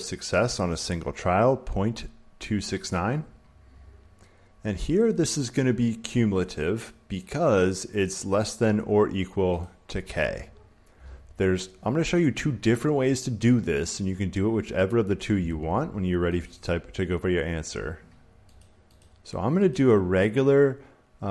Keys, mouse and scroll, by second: 0.7 click, 6.7 click, 7.2 click, 8.5 click, 9.5-11.6 drag, 16.3-18.4 drag, 18.5-21.3 drag.